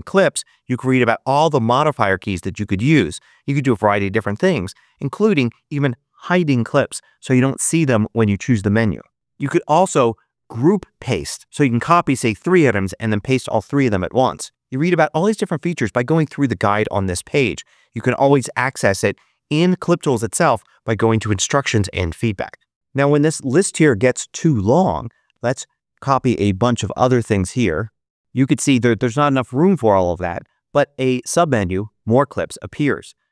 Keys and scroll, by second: 27.6 super+c.